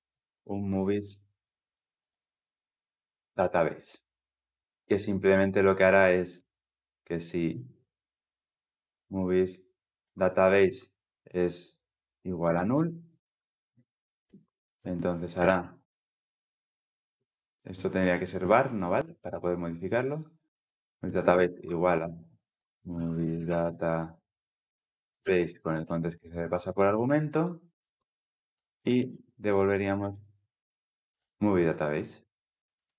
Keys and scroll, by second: 4.5 Return, 9.9 Return, 20.6 Return, 25.0 Return, 26.6 ctrl+alt+l, 26.8 ctrl+alt+o, 29.4 Return.